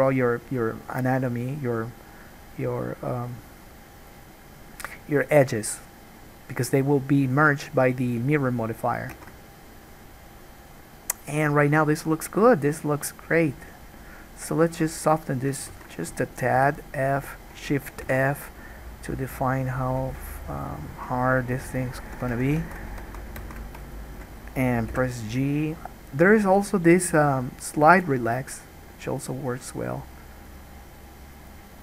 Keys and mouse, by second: 9.3 ctrl+z, 15.9 ctrl+z, 16.8 f, 17.4-20.3 drag, 18.2 shift+f, 20.3-25.1 shift+middle drag, 22.6 ctrl+z, 22.8 ctrl+z, 23.2 ctrl+z, 23.6 ctrl+z, 25.1 g, 31.1 middle click.